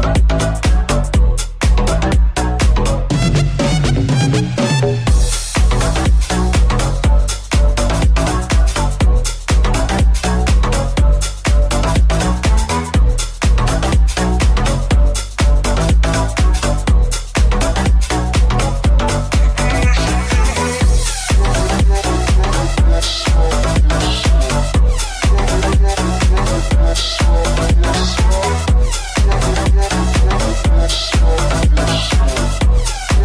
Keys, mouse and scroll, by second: 1.7 Tab, 2.1 right click, 2.2-3.4 middle drag, 2.4 x, 3.4 right click, 3.4-5.1 middle drag, 3.9 Tab, 4.7 3, 5.1 right click, 5.1-6.5 middle drag, 6.5 right click, 6.5 middle click, 6.9-15.5 middle drag, 12.5 alt+right click, 12.9 alt+shift+right click, 14.2 alt+shift+right click, 14.9 ctrl+z, 15.5 right click, 15.5-17.3 middle drag, 17.3 shift+right click, 17.4-20.1 shift+middle drag, 18.2 alt+e, 21.1 shift+middle click, 21.9-28.3 middle drag, 23.9 alt+z, 24.6 ctrl+z, 28.9 shift+middle click, 29.3-32.1 shift+middle drag, 29.7 right click, 32.2-33.2 shift+middle drag.